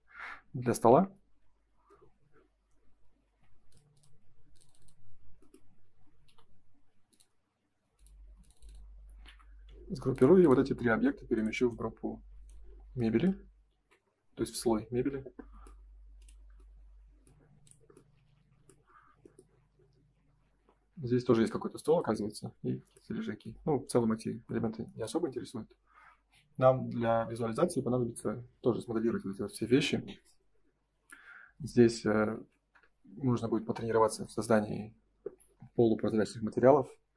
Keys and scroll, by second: 0.8 g, 3.2 ctrl+z, 6.3 l, 8.2 space, 9.2 g, 13.6 ctrl+s, 32.3 ctrl+s.